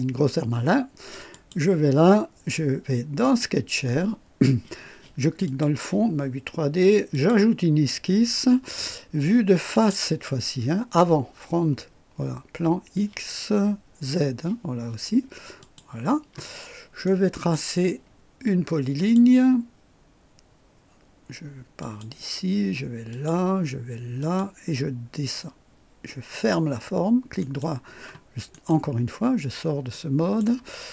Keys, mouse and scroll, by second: 1.3 click, 3.2 click, 5.4 click, 7.1 click, 9.7 click, 15.6 click, 16.5 scroll up 1, 17.0-17.7 right drag, 18.9 click, 21.7 click, 23.0 click, 24.1 click, 26.3 click, 27.4 right click, 28.5 right click, 29.2-29.7 scroll up 3, 29.9-30.6 right drag.